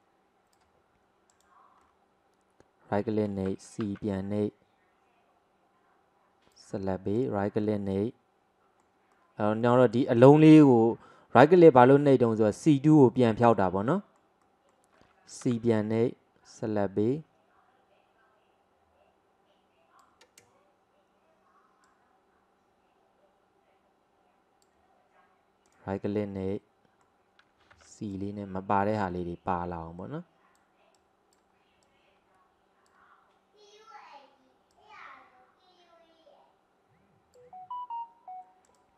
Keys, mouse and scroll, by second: 1.9-3.9 middle drag, 3.9 c, 7.7-12.9 middle drag, 13.2-15.5 middle drag, 15.5 c, 26.3-27.8 middle drag, 27.8 c.